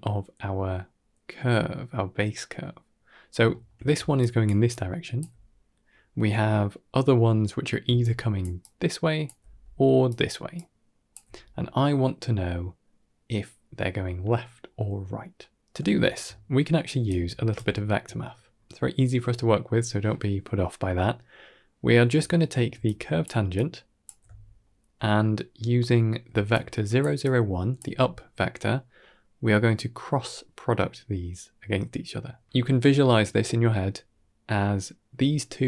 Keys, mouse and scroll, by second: 3.4 shift+middle click, 3.8-5.1 typing, 4.0 click, 4.6 click, 7.9 click, 7.9-11.1 typing, 8.5 click, 9.9 click, 10.4 click, 15.7 shift+middle drag, 16.3-16.7 middle drag, 16.9 d, 17.0 middle click, 17.3 right click, 17.6 shift+middle drag, 17.9 middle click, 18.4 scroll up 2, 18.7 shift+middle drag, 19.7 middle click, 22.1 shift+middle click, 22.6 d, 22.7 click, 23.2 d, 23.4 click, 23.4 d, 24.0 d, 24.2 shift+middle drag, 24.9 middle click, 26.1-27.7 typing, 26.4 click, 27.1 click.